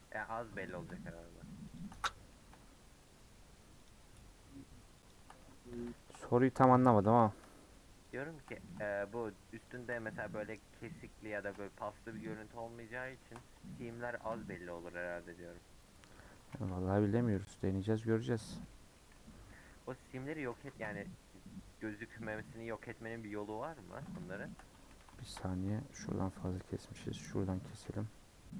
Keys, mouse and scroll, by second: 0.7 click, 1.8 shift+click, 1.9-3.9 middle drag, 3.9 shift+click, 5.1 shift+click, 5.4-6.5 middle drag, 6.5-6.8 scroll up 3, 6.8 shift+middle click, 7.1-8.1 scroll up 2, 8.1 shift+click, 8.4-9.7 middle drag, 9.7 shift+click, 10.0 middle click, 10.4 scroll up 1, 10.5-11.2 scroll down 4, 11.2-12.2 middle drag, 12.2 shift+click, 13.1 shift+click, 14.2 ctrl+KP_Add, 16.1 middle click, 16.4 scroll down 1, 16.5 a, 17.5 u, 18.6 middle click, 19.3 scroll down 1, 19.5 middle click, 20.4 Tab, 23.5 scroll up 1, 23.8-24.9 middle drag, 24.9 2, 25.2 shift+middle click, 26.0 alt+click, 27.3 alt+click, 27.7 a.